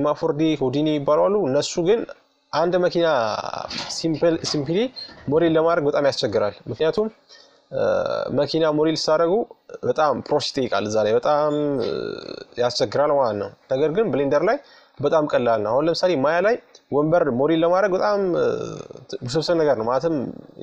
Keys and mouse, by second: 1.8-3.7 right drag, 3.5 f, 5.1-6.5 middle drag, 6.5-9.1 right drag, 8.5 f, 10.7-15.7 right drag, 15.7 middle click, 16.6 f, 18.5-20.6 right drag.